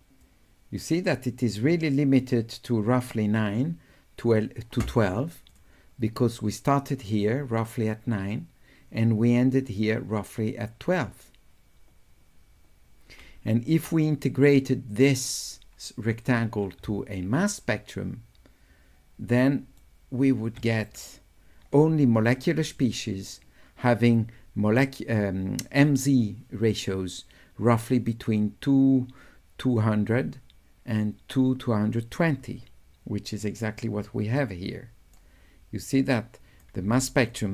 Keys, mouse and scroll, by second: 0.3 click, 16.9 s, 17.2 right click, 18.0 click, 18.7-19.8 right drag, 22.8 click, 34.4 right click, 36.1 click.